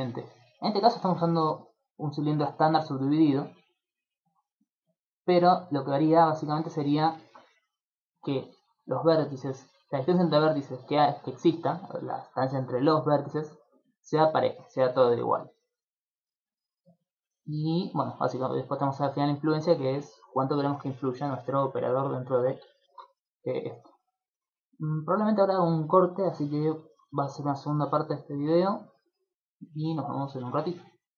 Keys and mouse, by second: 1.3 middle click, 2.3 middle click, 4.7 middle click, 5.1 middle click, 5.3 middle click, 5.7 middle click, 8.1 right click, 8.8 shift+right click, 9.3 shift+right click, 9.8 shift+right click, 10.2 shift+right click, 10.7 shift+right click, 11.1 shift+right click, 11.6 shift+right click, 12.3 shift+right click, 12.7 right click, 13.9 shift+right click, 14.3 shift+right click, 17.8 click, 18.3 click, 21.9 middle click, 22.3 shift+middle click, 22.7 ctrl+middle click, 24.1 click, 24.7 click.